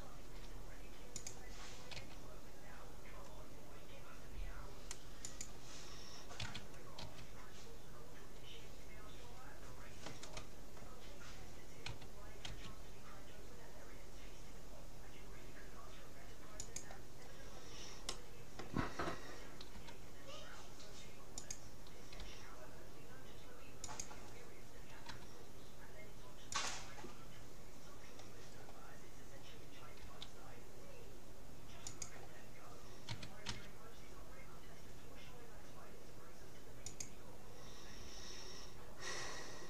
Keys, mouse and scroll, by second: 0.3 g, 2.1 s, 6.5 s, 11.9 s, 17.3-19.7 middle drag, 19.7 r, 22.3 g, 25.1 r, 28.7-29.5 scroll up 1, 29.5-30.7 middle drag, 30.1 g, 30.7-31.1 scroll down 1, 31.1 middle click, 33.1 s.